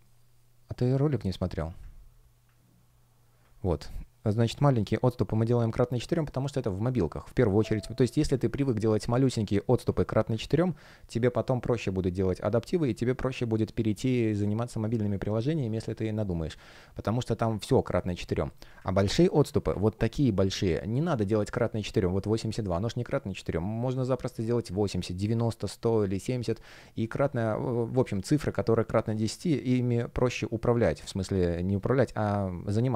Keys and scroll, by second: 3.6 space, 8.5 space, 26.2 space.